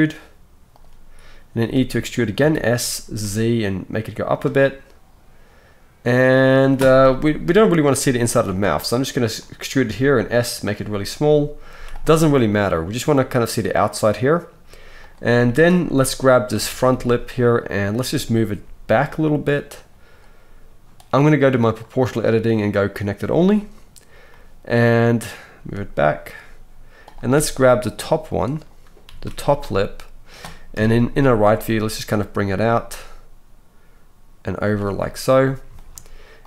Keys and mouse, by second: 1.6 e, 2.3 s, 7.4-13.0 right drag, 7.4 KP_3, 8.4 e, 9.8 s, 11.7 z, 13.0-21.1 drag, 14.9 middle click, 14.9 right click, 16.5 KP_3, 16.9 z, 18.5 g, 21.1-21.7 middle drag, 21.7-27.1 drag, 25.5 g, 27.1-30.8 middle drag, 29.1 z, 30.8 KP_3, 31.5 g.